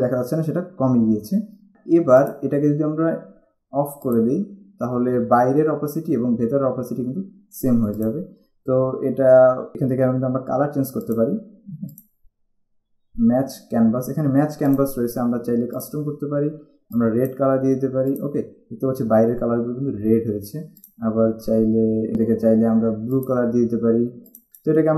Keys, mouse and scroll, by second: 2.4 click, 4.3 click, 8.2 click, 11.2 click, 14.9 click, 17.1 click, 21.0 click, 23.3 click, 24.7 click.